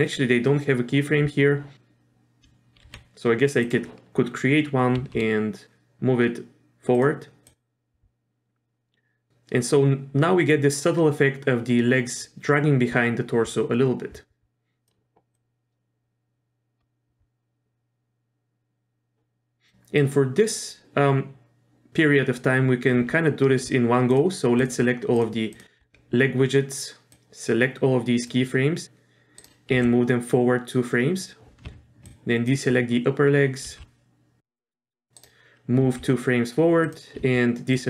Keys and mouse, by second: 2.9 r, 5.0 g, 7.5-14.9 drag, 15.3-19.7 drag, 20.0-20.7 drag, 25.2 shift+click, 25.5 shift+click, 27.1-28.3 drag, 28.8 g, 29.7 g, 32.2 ctrl+click, 33.7 g, 35.8 g, 37.7-37.8 ctrl+drag.